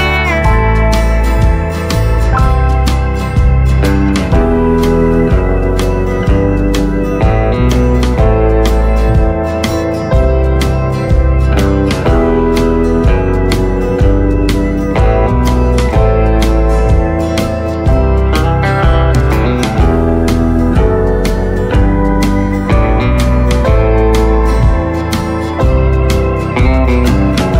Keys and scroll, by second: 3.6 ctrl+shift+z, 4.8 v, 16.9 space, 17.3 space, 17.7 space.